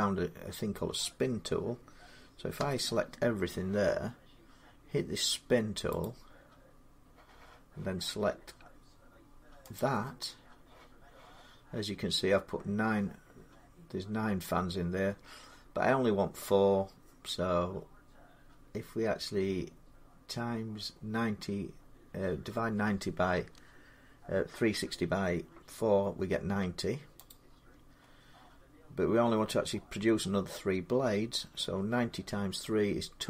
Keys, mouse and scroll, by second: 2.4 a, 5.8-7.2 drag, 9.6 click, 11.6-14.6 drag, 27.1-32.2 drag.